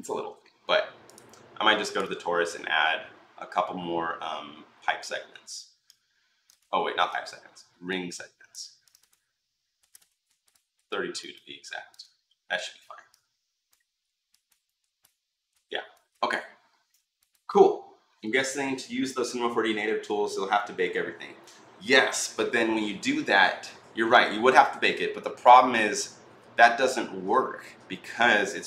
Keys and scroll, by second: 6.6 ctrl+z, 9.3-10.3 typing.